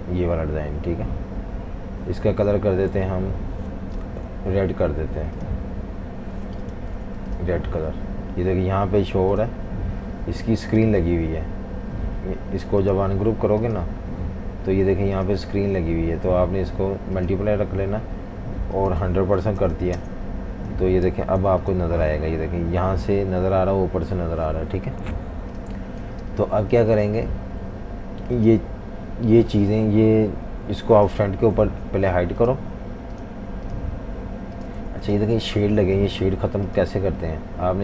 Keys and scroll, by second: 6.9 typing, 19.1-20.2 typing, 21.4 super+g, 26.1-27.3 typing, 31.6 super+3, 34.9 alt+super+3.